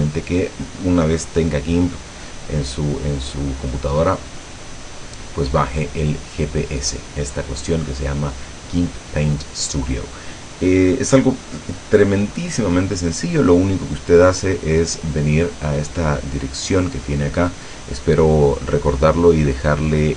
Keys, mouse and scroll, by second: 16.0 click, 17.1 click, 18.5 click.